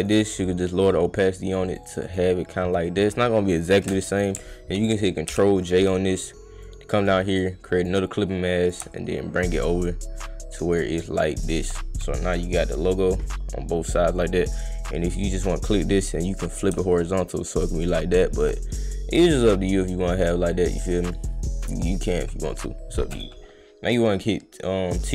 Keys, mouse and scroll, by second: 0.0 click, 0.4 click, 2.1 click, 3.6 click, 6.2 click, 7.0 click, 7.8 click, 8.6 click, 8.9-11.6 shift+drag, 13.2-14.3 drag, 15.0 click, 15.4-15.8 drag, 16.3 click, 17.1-18.3 shift+drag, 19.3 click, 20.7 click, 22.0 click, 22.4 click, 23.9 click.